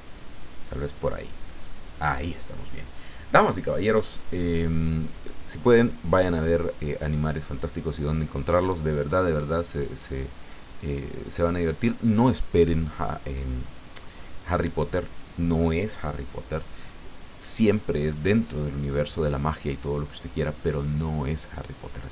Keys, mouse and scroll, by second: 3.4 click.